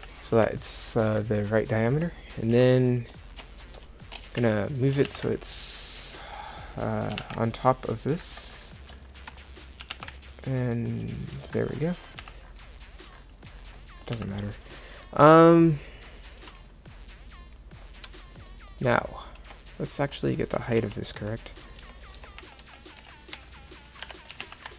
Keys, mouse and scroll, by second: 2.5 z, 4.4 KP_1, 5.0 g, 7.1 g, 9.8 g, 10.7 click, 12.2 z, 14.2 z, 19.4 Tab, 20.8 KP_1, 21.8 Tab, 22.2 Tab, 22.6 z, 23.0 a, 23.4 c, 24.3 g.